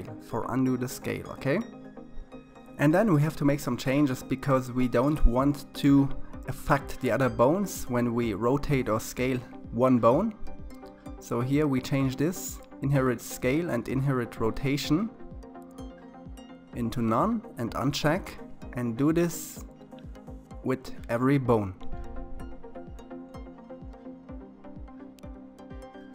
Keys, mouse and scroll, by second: 0.6 click, 7.2 click, 11.5 click, 11.9 s, 12.6 click, 13.7-16.9 drag, 19.2 click, 19.9-24.3 drag, 25.4 s.